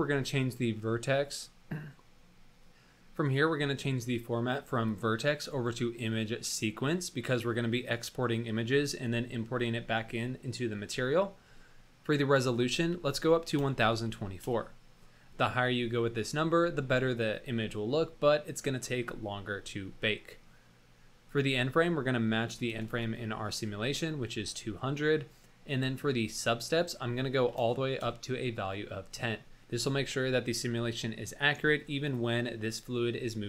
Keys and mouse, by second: 4.8-6.4 drag, 11.3 middle click, 12.3-14.6 drag, 21.3 click, 22.8 KP_0, 26.8-28.4 drag, 32.0 click.